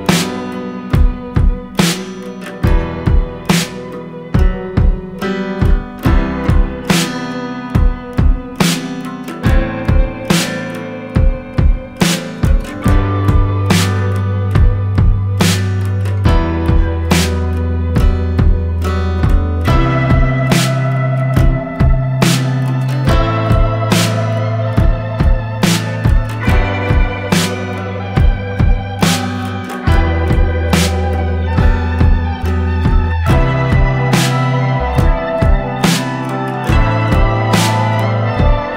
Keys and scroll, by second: 38.5 ctrl+-.